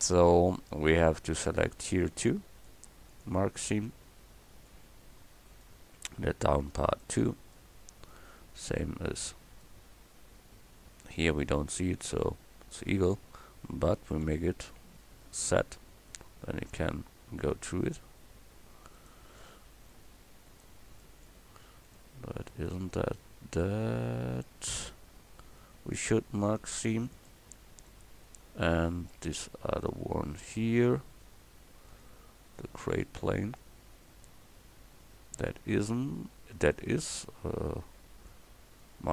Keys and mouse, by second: 1.6-3.1 right drag, 3.1 middle click, 3.9-5.5 drag, 5.5-7.1 right drag, 7.1 middle click, 7.6 click, 7.8 middle click, 9.8 click, 10.7 middle click, 10.8 click, 11.1-14.3 middle drag, 14.3 z, 17.4-19.4 right drag, 19.4-24.5 middle drag, 24.5-27.9 drag, 27.9-29.8 middle drag, 29.8-31.6 right drag, 31.6 click, 31.9 middle click, 32.5 click, 33.0-35.1 right drag, 35.1-38.3 drag.